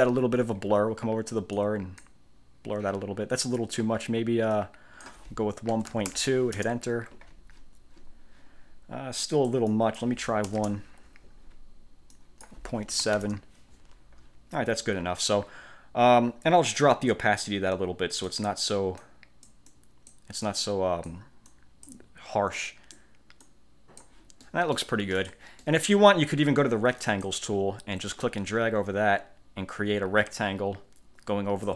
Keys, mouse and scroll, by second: 1.7 click, 4.7 click, 5.6-6.7 typing, 9.3 click, 10.6 1, 12.3 click, 13.1 ., 13.3 Return, 16.9-18.6 drag, 19.1 click, 19.8 click, 20.5 click, 21.6 click, 22.7 click, 23.5 click, 24.5 middle click, 25.3 click, 25.7 middle click, 27.1 click, 28.2-31.7 drag.